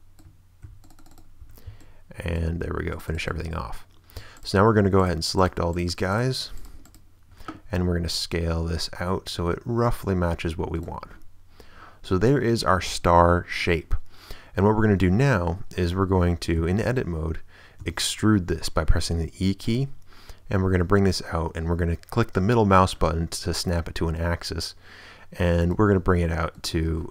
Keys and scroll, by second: 0.6 ctrl+w, 1.3 w, 1.7 ctrl+a, 2.7 ctrl+w, 7.7 shift+s, 11.6 a, 15.0 Tab, 16.3 Tab, 16.6 a, 17.8 e.